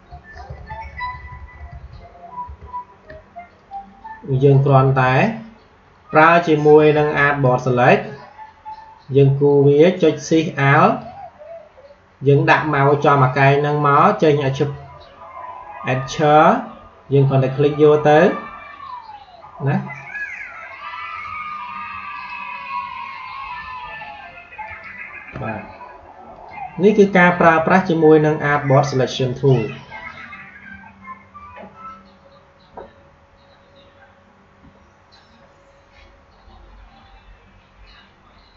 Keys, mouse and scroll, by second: 0.2 ctrl+z, 1.2 z, 3.4 click, 7.3 click, 10.8 alt+shift+click, 18.6 alt+shift+click, 24.5 alt+shift+click, 29.2 click, 38.5 click.